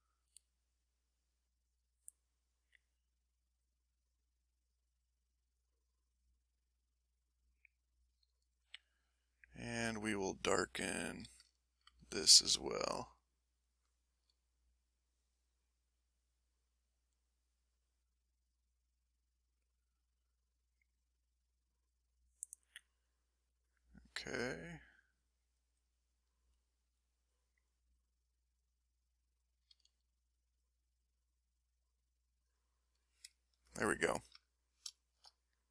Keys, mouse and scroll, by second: 0.1-1.5 drag, 2.0 click, 3.2 click, 5.1 click, 6.0-8.1 drag, 8.3-10.4 drag, 10.5 click, 10.8 click, 11.5 ctrl+click, 12.1 ctrl+s, 13.3 click, 15.0 click, 16.0 click, 17.1 click, 18.2 click, 18.8-19.9 middle drag, 21.3 click, 21.7 click, 22.4-23.7 middle drag, 24.2 click, 24.7 click, 25.3 click, 26.4 middle click, 27.1 click, 28.0 click, 28.7 click, 29.7 s, 30.2 click, 30.8 click, 31.5 click, 32.0 middle click, 33.0 ctrl+middle click, 33.7 ctrl+middle click, 34.8 ctrl+shift+middle click, 34.9-35.7 ctrl+shift+middle drag.